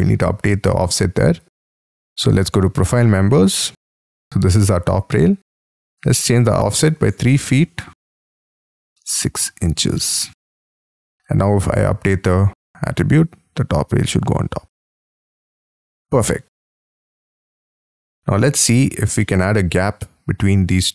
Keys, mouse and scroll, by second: 6.9-8.9 typing, 14.4-15.4 scroll up 13, 15.4 middle click, 16.4 scroll down 6, 16.8 middle click, 17.2 scroll down 5, 17.6 shift+middle click, 18.4-19.1 scroll up 18, 19.2 middle click, 20.0 middle click.